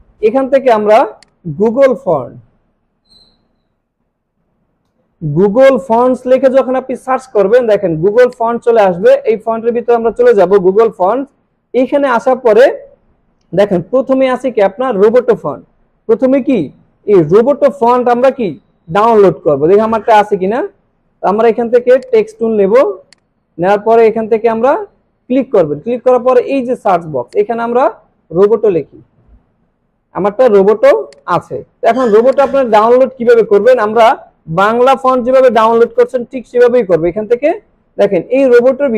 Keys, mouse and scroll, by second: 2.3-5.0 typing, 8.4 click, 12.6 scroll down 1, 14.2 scroll up 1, 17.9 scroll down 1, 20.0 click, 22.3 scroll down 1, 23.1 click, 27.3 click, 28.4-29.8 typing, 31.1 click, 36.9 scroll up 1, 37.7 scroll up 1, 38.1 scroll down 1, 38.7 scroll up 1.